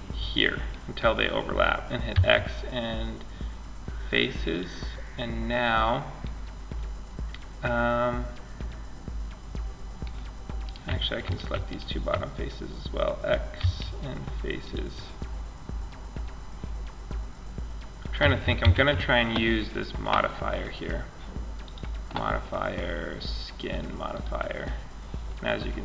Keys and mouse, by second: 0.0-3.8 middle drag, 1.3 x, 9.9-12.8 right drag, 12.8 x, 15.3-17.8 drag, 17.8 ctrl+Up, 20.8 click, 22.4-23.5 drag, 23.5-25.8 middle drag.